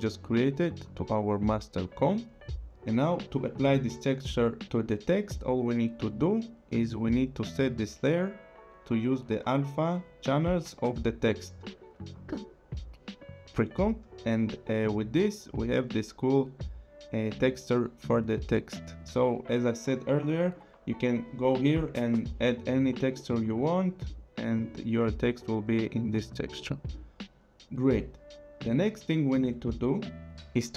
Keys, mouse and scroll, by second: 0.1 click, 6.3 click, 8.0 click, 13.2 click, 20.3 click, 24.1 click.